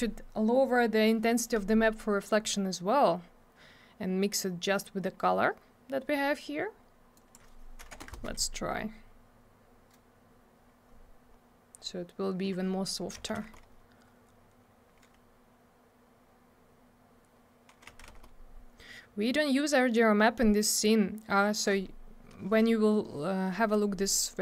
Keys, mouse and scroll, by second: 7.1 click, 7.3 click, 7.8 7, 8.0 Return, 13.1 7, 13.3 Return, 17.8 6, 18.1 Return.